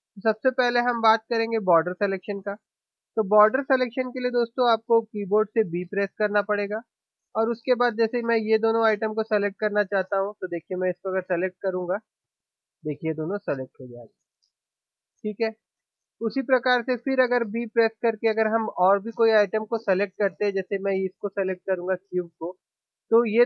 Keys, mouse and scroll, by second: 5.8 b, 18.5 b.